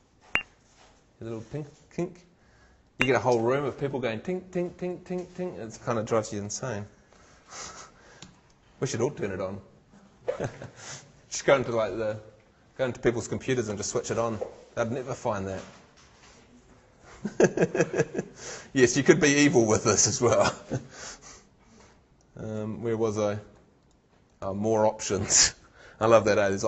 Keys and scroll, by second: 6.7 shift+super+z.